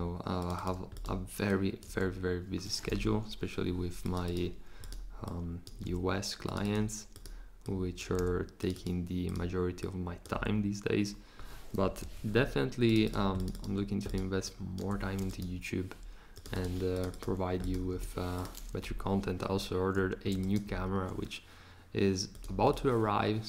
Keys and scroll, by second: 1.9 4, 3.1 Return, 5.8 4, 8.1 4, 10.3 4, 11.9 BackSpace, 14.8 5, 17.9 Return.